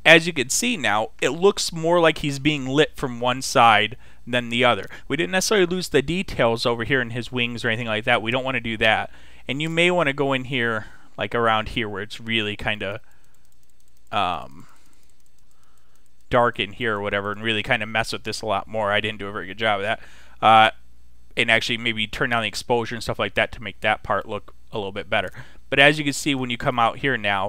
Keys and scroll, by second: 10.3 [.